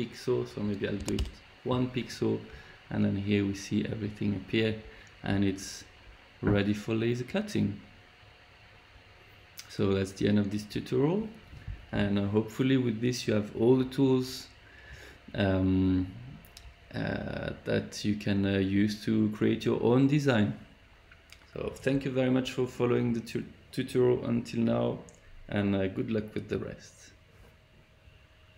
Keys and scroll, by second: 0.9 1, 1.1 Return.